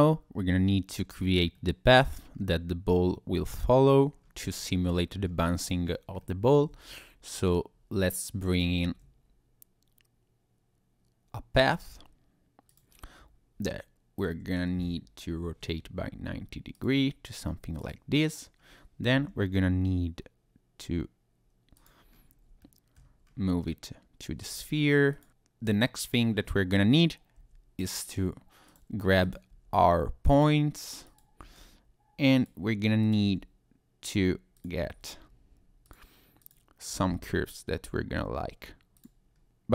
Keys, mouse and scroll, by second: 0.0 scroll up 1, 0.3-0.7 scroll down 1, 0.7 middle click, 1.5 shift+middle click, 2.3-3.1 scroll up 2, 4.1 scroll down 4, 4.6 middle click, 5.2-5.6 scroll up 2, 5.6 click, 5.8 scroll down 1, 6.2 middle click, 6.7 shift+a, 8.5 click, 8.8 shift+a, 14.2 click, 15.3 r, 16.7 ctrl+click, 17.8 click, 18.6-19.1 scroll up 1, 19.1 g, 21.7 click, 22.1-22.5 scroll up 1, 22.6 shift+middle click, 23.2-23.6 scroll up 1, 23.6-24.3 scroll down 3, 24.4 Tab, 25.1 click, 27.3 g, 28.7 click, 29.2 click, 29.5 g, 30.3 click, 31.0 click, 31.4 g, 32.4 click, 33.0 click, 33.2 g, 34.1 click, 34.5 click, 34.8 g, 35.8 click, 36.5 click, 36.9 g, 38.9 click, 39.3 scroll down 1, 39.5-39.7 scroll up 3.